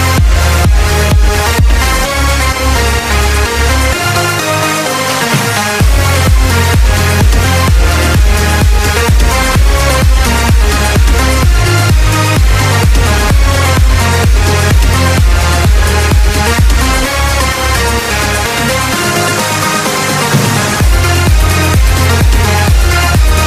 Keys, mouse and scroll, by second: 2.5 b, 5.6 b, 7.2 b, 7.7 b, 12.2 b, 14.9 b, 18.0 b, 20.5 b, 22.2 b.